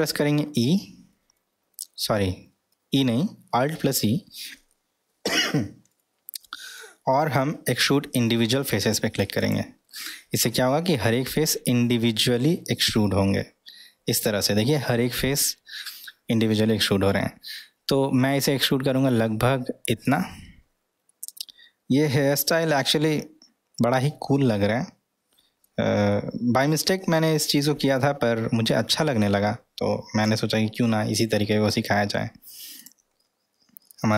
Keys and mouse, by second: 0.6 e, 21.1-23.0 middle drag, 23.8-25.7 middle drag, 26.1-30.8 middle drag, 31.5-32.6 middle drag, 32.8 click, 33.2-34.1 middle drag.